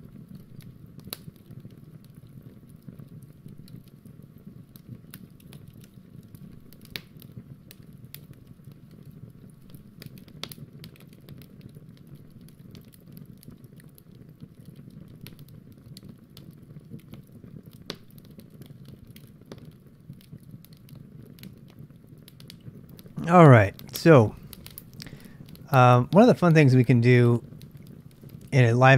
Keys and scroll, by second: 0.0-6.6 typing, 11.8 Return, 13.5 ctrl+[, 13.5 ctrl+j, 14.9-15.9 typing, 16.9-18.4 typing, 27.3-28.0 typing.